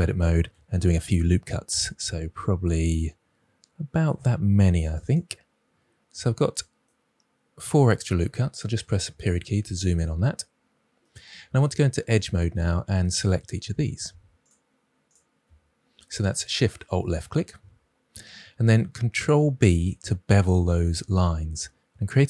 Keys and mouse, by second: 0.6 ctrl+r, 4.8 click, 5.0 click, 8.8 KP_Decimal, 12.1 click, 15.0 alt+shift+click, 19.4 ctrl+b.